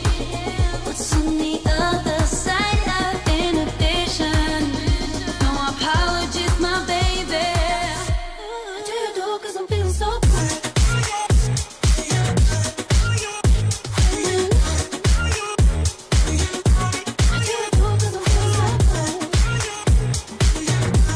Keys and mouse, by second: 1.5 r, 4.4 a, 6.2 r, 8.9 a, 9.1 i, 13.7-21.1 drag.